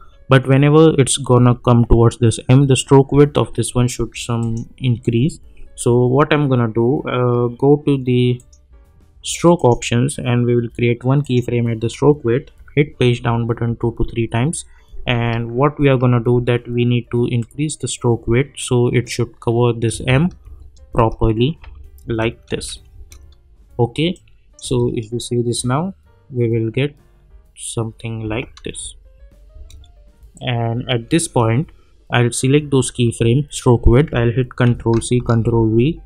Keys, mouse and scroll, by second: 4.4 click, 8.3 click, 12.8 Page_Down, 15.4-16.1 alt+scroll up 1, 17.4-19.2 drag, 19.3-19.7 scroll down 1, 19.9 space, 24.1-24.7 click, 24.6 space, 28.2 space, 28.8 space, 30.3-31.2 drag, 34.7 ctrl+c, 35.2 ctrl+v.